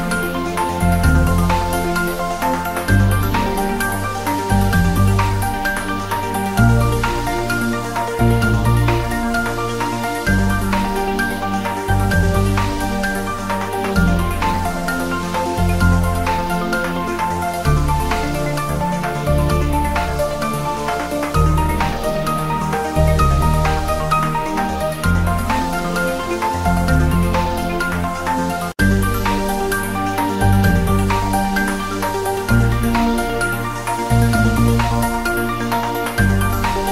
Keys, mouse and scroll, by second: 0.2-0.9 click, 0.9 scroll down 1, 1.0 scroll up 1, 1.7-2.2 click, 2.2 scroll down 1, 2.7 scroll up 1, 3.6 ctrl+z, 4.1-4.5 click, 6.1 Return, 7.2 scroll down 1, 7.7 scroll up 1, 7.8 ctrl+s, 9.4-10.5 scroll down 1, 10.9-11.3 scroll up 1, 12.4-12.8 drag, 15.3-16.0 scroll down 1, 20.0-20.3 click, 20.8 g, 21.8-23.3 drag, 25.0-26.0 drag, 25.2 ctrl+s, 26.2-26.5 drag, 29.4 scroll up 1, 30.0-31.3 drag, 31.9 scroll up 1, 32.8-34.9 click, 36.4-36.9 scroll up 1.